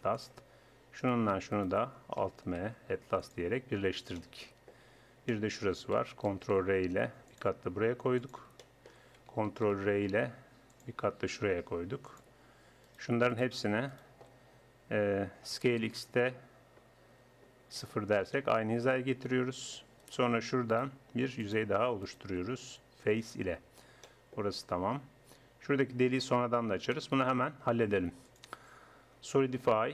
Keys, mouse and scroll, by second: 2.6 alt+m, 6.5 ctrl+r, 7.3-8.6 middle drag, 10.3 ctrl+r, 12.9-15.5 drag, 15.5 s, 20.0-21.5 right drag, 23.0 f, 26.1 middle click, 26.7 Tab, 28.3-29.9 drag.